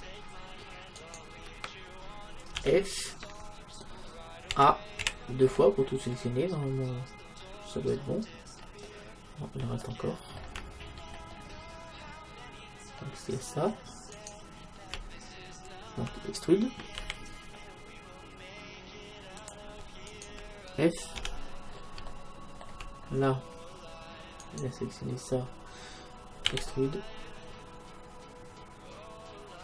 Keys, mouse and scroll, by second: 1.0-2.6 right drag, 2.6 f, 4.6 a, 5.1 a, 5.5-8.2 middle drag, 8.6-14.2 middle drag, 14.2-16.0 right drag, 17.0 e, 19.5-22.0 drag, 20.1-22.1 right drag, 21.2 f, 21.8 middle click, 24.4-26.1 drag, 26.1 right click, 26.5 e.